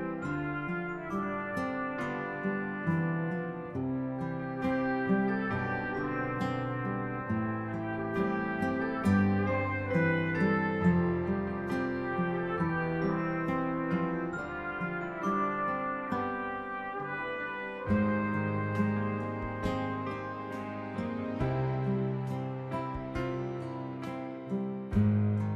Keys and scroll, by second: 7.8-13.1 typing, 24.3 ctrl+-, 24.7 ctrl+-.